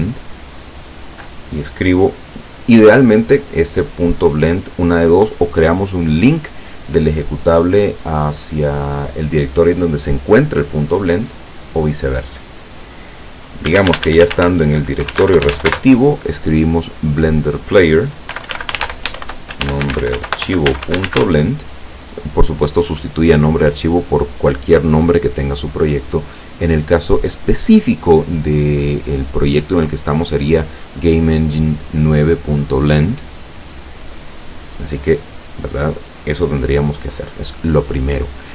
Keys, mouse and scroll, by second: 13.7-15.6 typing, 18.4-21.2 typing, 34.4 click.